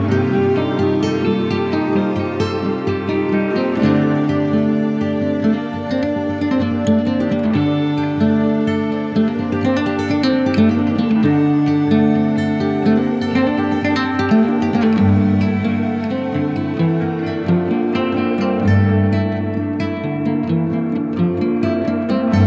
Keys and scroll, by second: 15.8 super+i, 17.1 z, 18.4 b.